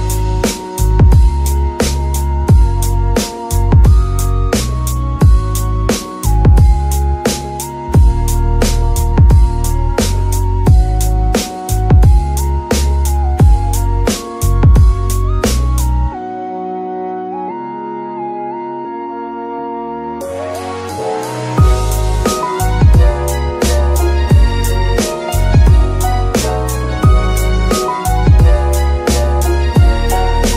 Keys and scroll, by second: 5.9 z, 17.7 ctrl+Tab, 20.5 z, 20.8 g, 21.1 Escape, 23.6 g, 23.8 Escape, 26.4 g, 26.7 Escape.